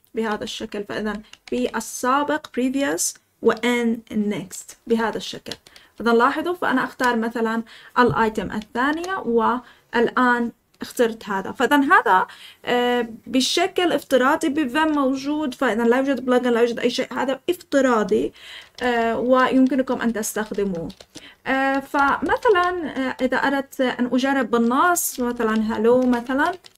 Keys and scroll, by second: 0.3 ctrl+p, 0.9 ctrl+p, 1.3 ctrl+p, 4.5 ctrl+n, 5.4 ctrl+n, 8.8 Return, 18.6 Escape, 18.7-23.0 typing, 24.6-26.7 typing.